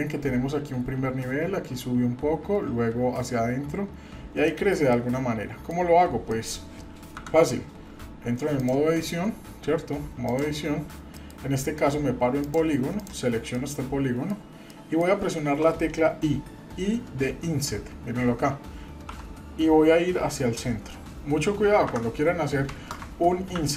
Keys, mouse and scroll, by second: 4.5-4.8 middle drag, 4.9-5.7 middle drag, 5.8 scroll up 1, 6.3 shift+middle click, 7.2 KP_Divide, 8.6-10.4 drag, 11.2 middle click, 12.4 click, 13.0 click, 13.5 middle click, 14.7 middle click, 23.6 ctrl+z.